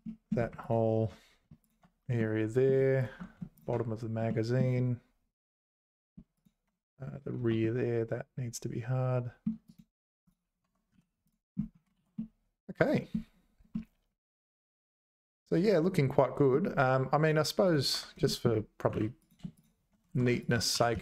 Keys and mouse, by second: 0.0 middle click, 0.6 alt+shift+click, 2.2 middle click, 4.3 middle click, 6.4 shift+click, 7.6-9.4 middle drag, 9.7 right click, 10.6 Tab, 10.9 z, 11.2 click, 12.0 ctrl+s, 12.2 middle click, 13.7-16.5 middle drag, 17.3 click, 17.7 click, 17.9 Tab, 18.2 shift+middle click, 18.9 3, 19.6 shift+click, 20.1 ctrl+z, 20.7 g.